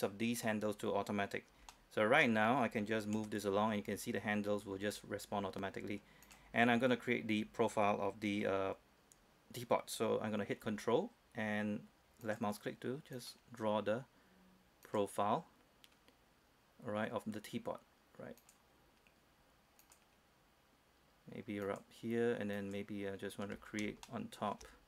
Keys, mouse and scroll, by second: 0.5 scroll up 1, 0.8 scroll down 1, 1.8-3.0 shift+middle drag, 3.2 g, 6.3 click, 6.9-7.3 scroll up 1, 7.3-10.7 scroll down 1, 12.3 ctrl+click, 14.9 ctrl+click, 18.5 ctrl+click, 23.7 scroll up 1, 24.1 shift+middle click.